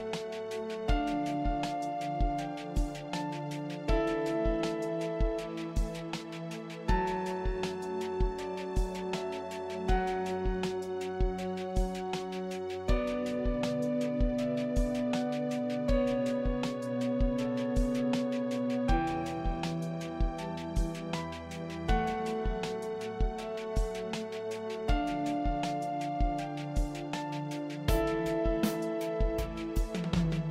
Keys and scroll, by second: 5.7 Return, 22.1 ctrl+t, 28.9 Return.